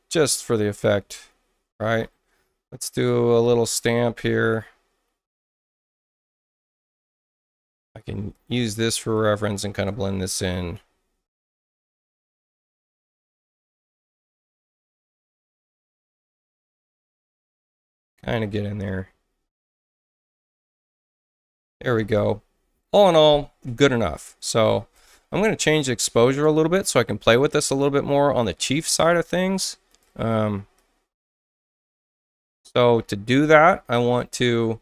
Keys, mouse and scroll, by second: 0.5 click, 3.6 s, 4.6-6.0 alt+right drag, 8.3 alt+click, 9.1 click, 11.3 alt+click, 12.1 click, 13.7 alt+click, 14.4 click, 15.2 click, 16.8 click, 18.8 alt+click, 20.2 click, 29.9 alt+click, 30.7 click, 32.2 click.